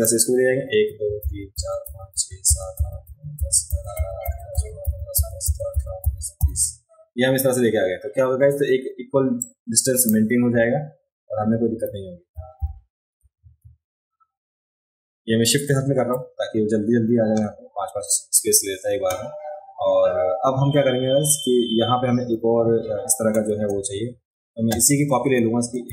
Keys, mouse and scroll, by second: 9.4-10.1 drag.